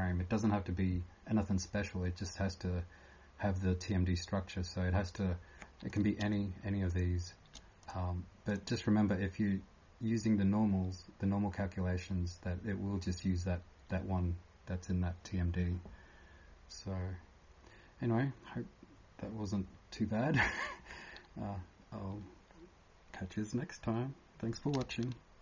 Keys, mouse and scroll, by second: 6.9 shift+click, 7.8 click, 8.5 click.